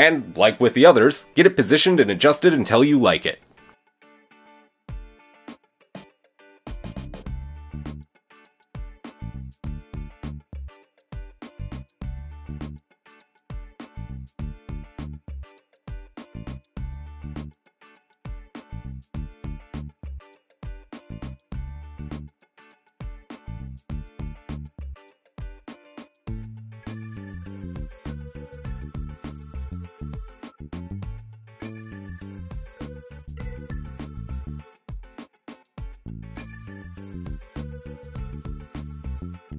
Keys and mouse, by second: 1.3-6.2 middle drag, 4.4 g, 7.2-10.7 shift+middle drag, 8.9 Tab, 10.7 click, 10.9-14.7 middle drag, 15.9 g, 20.9-22.2 middle drag, 22.2 click, 22.2-26.0 middle drag, 26.0 click, 26.8 shift+click, 31.0 g, 32.9-35.6 drag, 34.6 g, 36.0-38.4 drag, 38.4 shift+middle click, 38.5 shift+click, 38.6 shift+middle click.